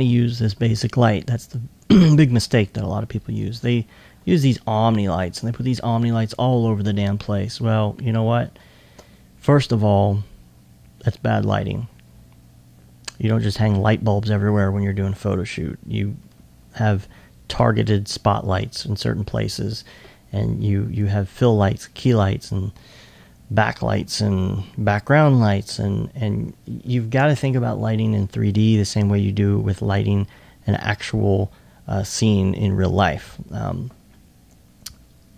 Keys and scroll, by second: 27.4 alt+1.